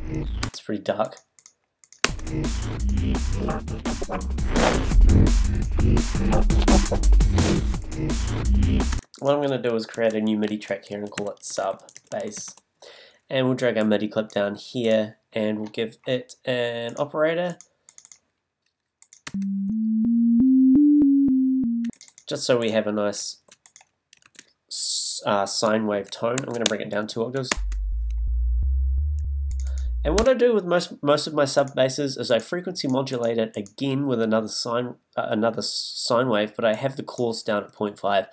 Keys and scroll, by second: 0.4 space, 2.0 space, 8.9 space, 9.9 shift+super+t, 10.5 shift+super+r, 11.4 shift+u, 11.9 shift+b, 19.3 space, 21.8 space, 23.3 super+z, 26.4 super+a, 27.1 shift+Down, 30.2 space.